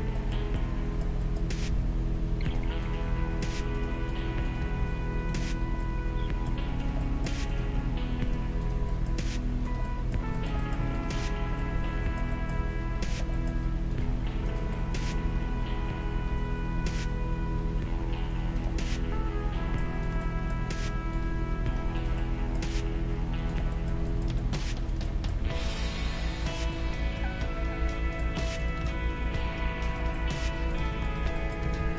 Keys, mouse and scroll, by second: 1.7 g, 2.9-6.2 right drag, 3.1 g, 4.6 g, 5.6-8.8 middle drag, 6.8-13.1 right drag, 7.8 g, 9.0-12.1 middle drag, 12.6 g, 13.9-16.3 right drag, 15.2 g, 16.1 middle click, 18.9-21.9 middle drag, 20.0-23.9 right drag, 22.1-23.7 middle drag, 22.6 g, 23.9-25.3 middle drag, 24.9 right click, 25.4 g, 26.6-28.1 middle drag, 28.6-30.4 right drag, 28.9 g, 30.1-31.9 middle drag, 30.7-31.9 right drag, 31.6 g.